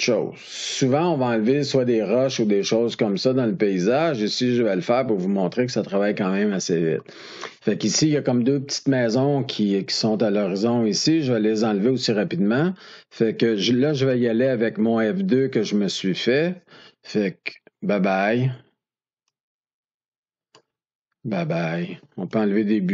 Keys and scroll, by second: 17.9 F2, 21.1 F2.